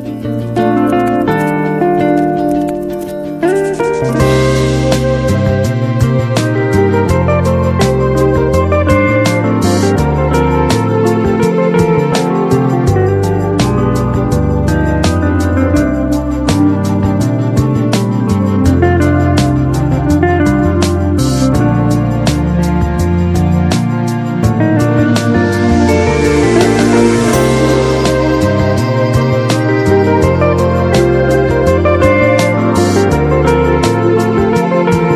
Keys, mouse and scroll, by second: 2.1 ctrl+e, 6.2 click, 9.5 click, 12.0 click, 19.1 click, 21.9-28.5 drag.